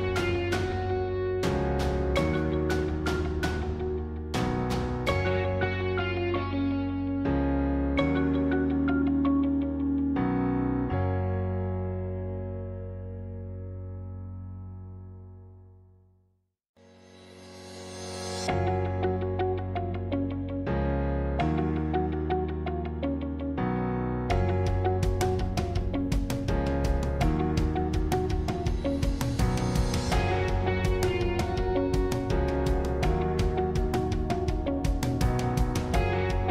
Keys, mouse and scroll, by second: 2.0 click, 2.6-4.0 middle drag, 4.0 shift+d, 6.3 s, 10.3 middle click, 11.2 e, 13.7-15.3 middle drag, 15.3 typing, 18.6-20.4 middle drag, 20.4 e, 22.6-24.4 middle drag, 24.4 click, 24.7-27.9 middle drag, 29.7 shift+click, 32.2 shift+click, 34.5 shift+click, 35.9-36.5 middle drag.